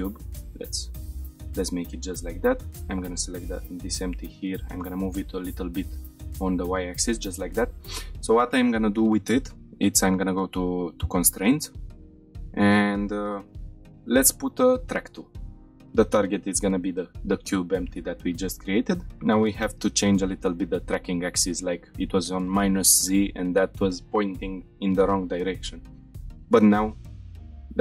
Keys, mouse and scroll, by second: 0.3 click, 0.8 shift+middle click, 1.4 click, 2.8 click, 3.7 g, 4.1 y, 4.7 click, 5.0-5.4 shift+middle drag, 5.6 middle drag, 6.0 shift+middle click, 6.5 scroll down 1, 6.7-7.1 shift+middle drag, 9.9 click, 11.6-14.7 drag, 15.6-16.9 drag, 19.1 click, 21.9 click, 23.5 shift+middle click, 26.0 click, 27.0 shift+middle drag, 27.4 middle click.